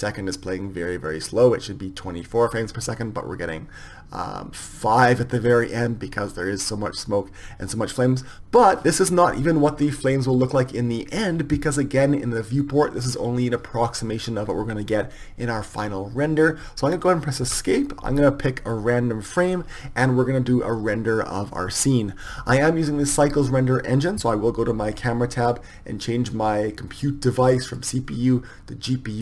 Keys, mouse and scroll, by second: 17.5 Escape, 18.8-29.2 drag.